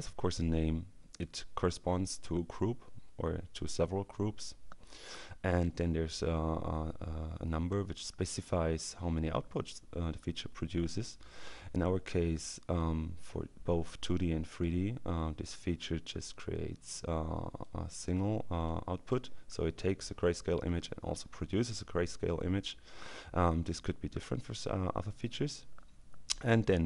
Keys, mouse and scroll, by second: 1.2 click, 5.7 click, 12.4-14.6 drag, 14.7-16.0 drag, 16.2 click, 17.3-18.6 drag, 18.7 click.